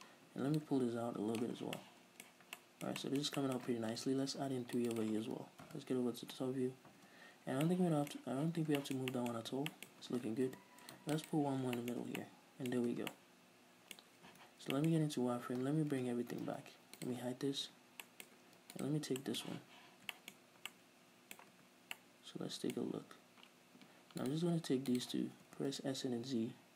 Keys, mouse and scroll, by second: 1.8 scroll down 2, 2.0 middle click, 2.6 z, 2.8-5.2 middle drag, 4.1 ctrl+r, 5.2 click, 5.5 right click, 5.9 KP_7, 7.2 a, 7.9-11.5 middle drag, 8.6 z, 9.6 Tab, 10.1 Tab, 10.7 ctrl+r, 11.5 right click, 11.8 scroll down 1, 12.0-12.4 shift+middle drag, 12.3 a, 13.1 Tab, 13.4 middle click, 14.3 scroll up 2, 14.5 z, 15.0-16.2 middle drag, 16.2 alt+h, 16.7 z, 17.2 right click, 17.9 h, 18.3-19.0 middle drag, 19.0 right click, 19.5-23.4 middle drag, 20.6-20.9 scroll up 2, 21.9 Tab, 23.4 scroll up 1, 24.5 right click, 25.1 shift+right click, 25.6 s.